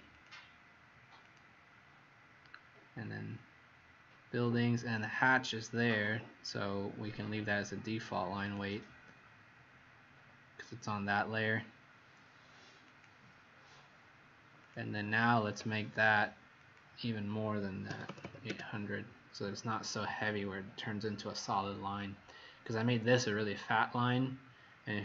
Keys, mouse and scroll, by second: 17.8 KP_8, 18.0 KP_0, 18.2 KP_0, 18.4 Return.